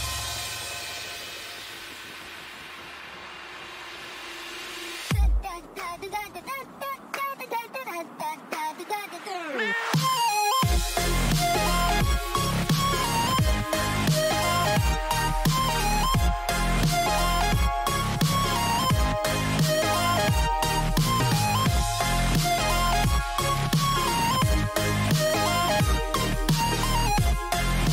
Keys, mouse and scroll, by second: 2.4-3.9 middle drag, 3.9-5.0 right drag, 5.0 click, 5.0-6.3 middle drag, 7.6 a, 8.1 right click, 8.8-10.8 middle drag, 12.6 right click, 13.3 middle click, 13.5 right click, 14.4 middle click, 16.8-19.0 drag, 20.1-21.6 middle drag, 21.4 a, 21.8 z, 22.3 z, 22.7 Tab, 23.1 middle click, 23.3 middle click, 23.5 middle click, 25.2 middle click, 25.6 middle click.